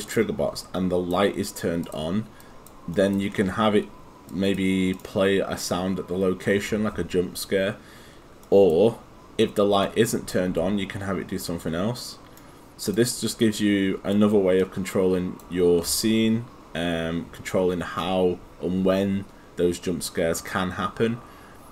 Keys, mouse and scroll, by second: 3.0 right click, 4.3 click, 9.9 click, 13.1 right click, 14.6 click.